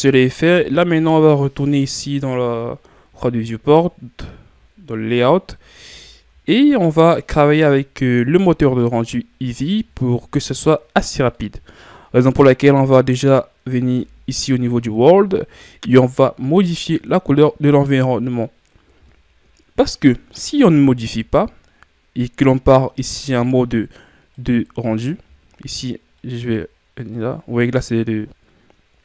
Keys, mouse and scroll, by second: 1.1 scroll up 1, 1.2-1.9 scroll down 5, 1.9-3.1 scroll down 1, 3.1-6.0 scroll down 1, 6.0-8.4 shift+scroll down 2, 24.5 click.